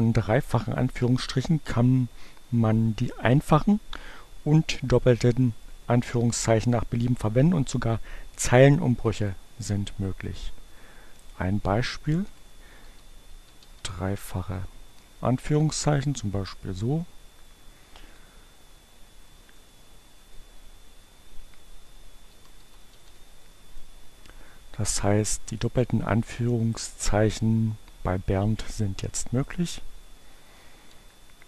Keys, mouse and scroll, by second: 11.2 click, 11.8 Delete, 13.8 shift+2, 14.4 Return, 16.3 Right, 18.7 Delete, 19.2 Return, 21.8 shift+2, 25.5 click, 26.7 click, 29.5 click, 30.1 Up.